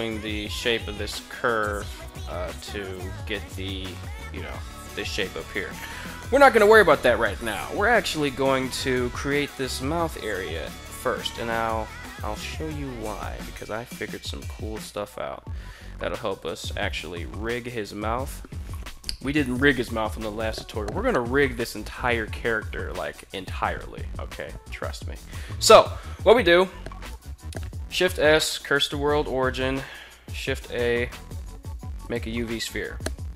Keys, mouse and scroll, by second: 27.3 shift+s, 27.7 shift+s, 28.7 shift+a.